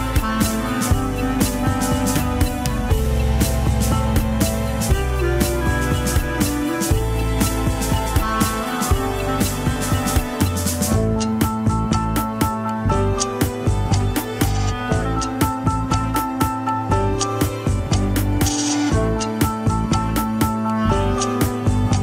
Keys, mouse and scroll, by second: 0.7 shift+h, 1.4 click, 2.1 Tab, 2.4 scroll up 2, 2.6 alt+z, 3.3 g, 8.3 click, 8.5 g, 9.9 click, 10.1 g, 11.0 click, 11.2 g, 11.8 scroll down 4, 14.0 ctrl+Tab, 14.8 alt+g, 16.0 click, 16.5 scroll up 1, 16.8 Tab, 17.4 click, 17.8 shift+click, 18.7-19.7 drag, 19.7 s, 20.5 click, 20.7 g.